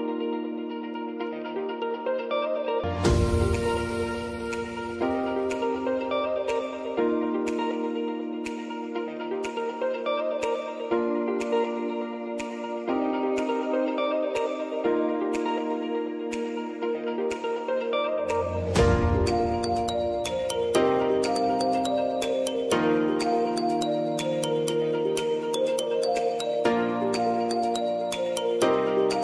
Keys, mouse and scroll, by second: 0.9 ctrl+d, 1.4-5.6 drag, 7.1-7.8 typing, 8.5 click, 9.6 =, 12.9-24.3 drag, 24.3-28.3 drag, 28.3 F9, 29.1-29.2 drag.